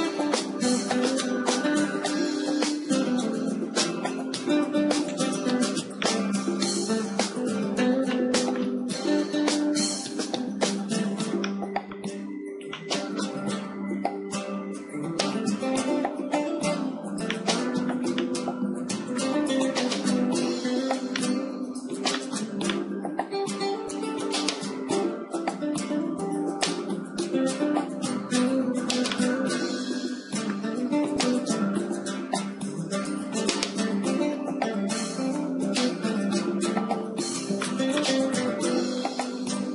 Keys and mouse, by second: 2.7 e, 5.5-7.8 drag, 7.8-9.1 middle drag, 9.1-16.3 right drag, 14.7 s, 17.2-19.3 right drag, 19.3-20.5 middle drag, 22.9-25.7 drag, 25.7 Tab, 26.6 s, 28.5-30.3 right drag, 30.3 middle click, 31.2 alt+h, 33.1 z, 33.8 z, 35.1 middle click, 36.0-39.1 middle drag, 38.5 KP_0, 39.3 middle click.